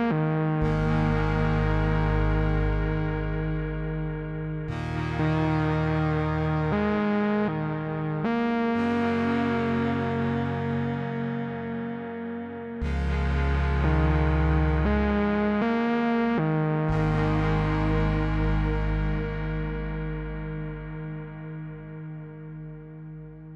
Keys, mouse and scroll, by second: 10.8 click, 16.3 click, 20.6-21.6 click.